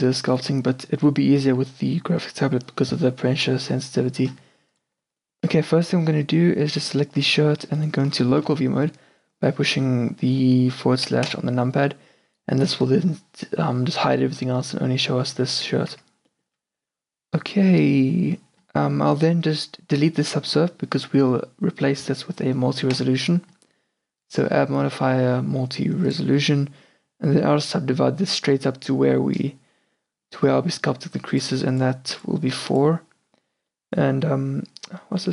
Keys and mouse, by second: 6.0-11.3 middle drag, 11.3 KP_Divide, 14.0-15.2 middle drag, 15.2 Tab, 15.7 a, 16.0 Tab, 23.0-26.1 drag, 31.4 click, 33.8-35.3 middle drag.